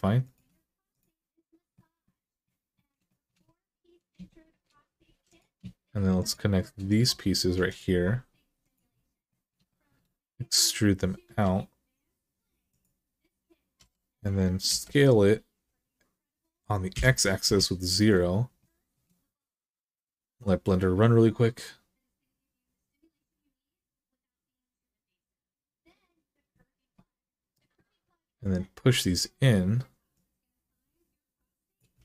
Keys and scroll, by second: 4.9 2, 13.6 s, 14.5 x, 16.7 0, 17.2 Return, 31.8 alt+z.